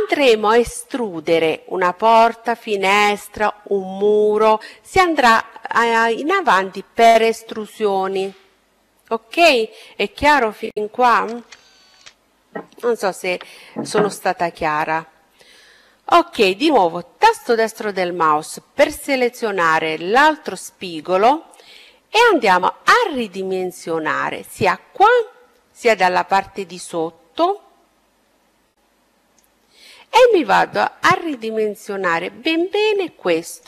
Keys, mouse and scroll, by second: 16.0-17.9 right drag, 20.0-21.9 drag, 24.7-26.7 right drag, 25.7-27.6 drag, 29.0-31.0 right drag, 30.3-32.0 drag.